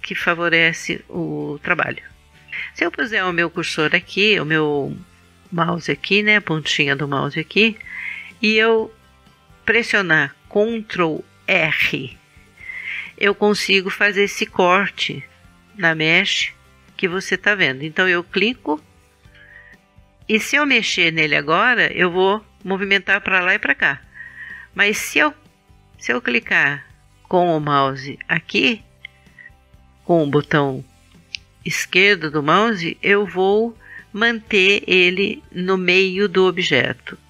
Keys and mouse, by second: 12.1 ctrl+r, 28.9 click.